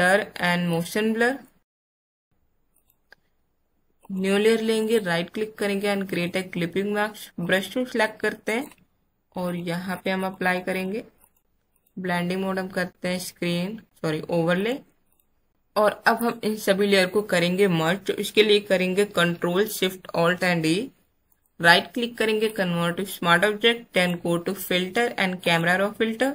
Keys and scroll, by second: 15.5 space, 20.0 ctrl+alt+shift+e.